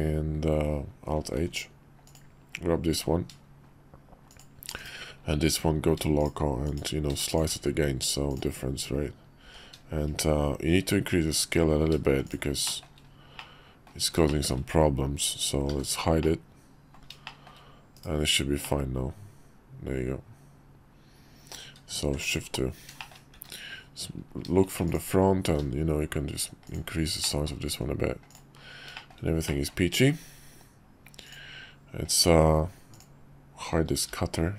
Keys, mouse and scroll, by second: 1.1 alt+h, 4.3 shift+click, 4.7 /, 6.7-7.1 drag, 7.3 shift+click, 7.5 q, 9.4 x, 10.7 s, 12.7 shift+middle click, 13.4 middle click, 14.3 shift+middle drag, 15.7 h, 16.2 middle click, 17.3 shift+middle drag, 17.9 /, 18.6-21.5 middle drag, 22.0 shift+2, 23.0 shift+middle click, 23.3 `, 25.4 s, 27.3 middle click, 27.7 `, 28.9 shift+middle drag, 29.4 middle drag, 34.1 h.